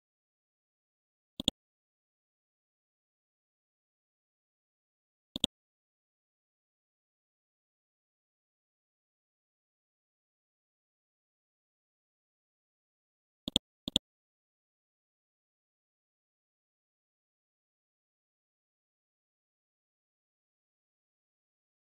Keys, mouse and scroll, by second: 1.4 click, 5.3 click, 6.4-8.1 typing, 9.8 typing, 11.4-13.2 scroll down 1, 13.5 click, 14.7 scroll down 1, 17.1 scroll down 1, 21.3-21.9 scroll up 1.